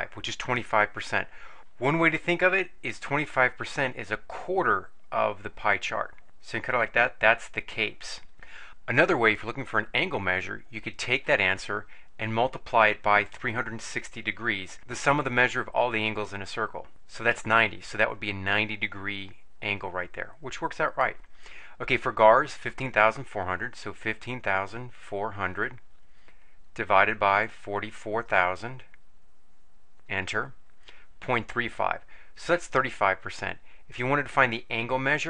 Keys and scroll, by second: 13.3 3, 13.8 6, 14.6 0, 16.9 Return, 23.4-25.6 typing, 27.3 4, 27.7 4, 28.3 0, 28.5 0, 29.8 0, 30.0 Return.